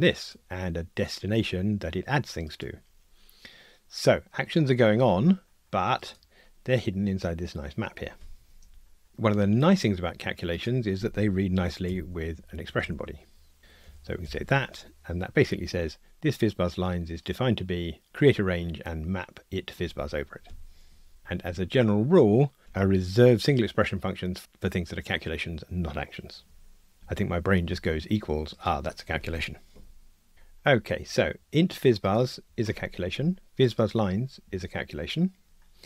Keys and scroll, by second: 11.9 alt+Return.